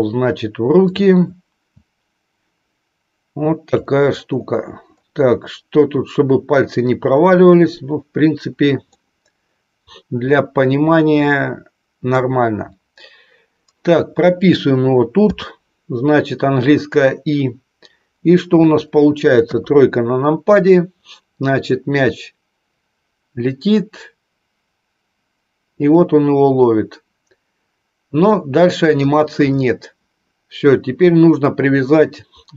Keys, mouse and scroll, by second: 0.9-3.8 drag, 8.8-9.4 scroll up 1, 9.4-12.0 middle drag, 12.0-15.1 scroll down 1, 15.1-16.0 scroll down 1, 16.0-17.1 scroll down 1, 17.1-18.0 scroll down 1, 18.0-19.3 scroll down 1, 19.3 KP_3, 21.8-29.2 drag.